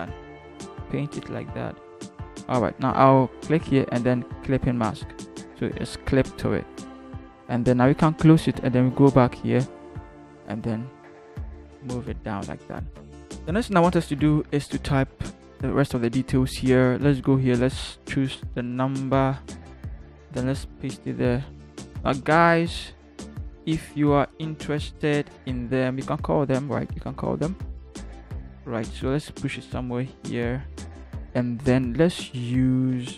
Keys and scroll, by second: 10.3 Down, 10.6 Down, 11.3 v, 11.4 Down, 11.6 Down, 11.8 Down, 12.0 Down, 13.1 Down, 13.2 Down, 13.2 Right, 13.2 Right, 14.4 t, 19.1 ctrl+c, 20.4 ctrl+v, 29.0 v.